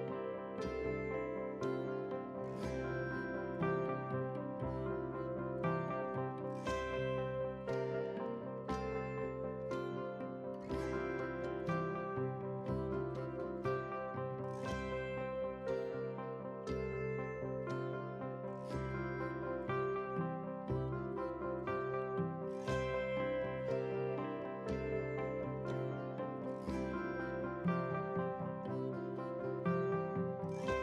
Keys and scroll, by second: 3.1 shift+F11, 16.9 ctrl+g, 17.9 ctrl+c, 18.8 ctrl+v.